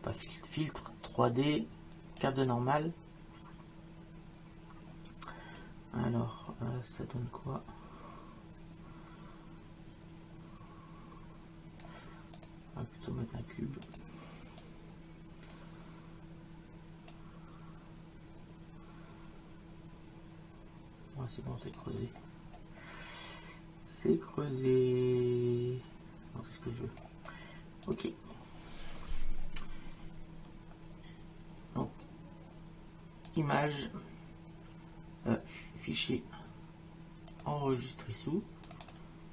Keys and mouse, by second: 2.2 click, 5.6 click, 12.4 click, 13.9 click, 17.1 click, 23.3 click, 27.9 click, 33.3 click, 37.3 click, 38.7 click.